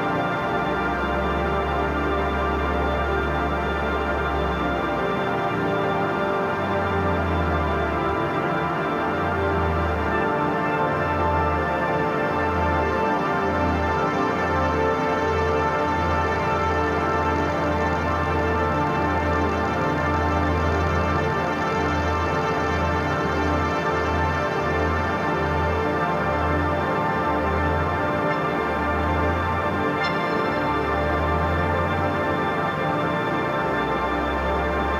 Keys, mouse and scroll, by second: 3.2 shift+Down, 4.1 click, 4.9 shift+Down, 7.3 click, 11.0-13.2 drag, 13.2-15.9 drag, 17.7-23.1 drag, 26.7 shift+Down, 28.4-30.0 drag, 32.5 click, 33.7 Left.